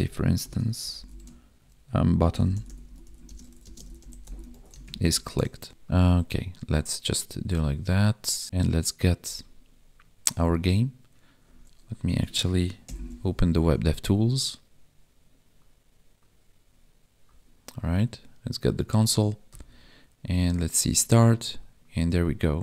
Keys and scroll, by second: 3.2 space, 3.6 space, 5.5 ctrl+a, 5.7 ctrl+s, 12.8 ctrl+shift+c.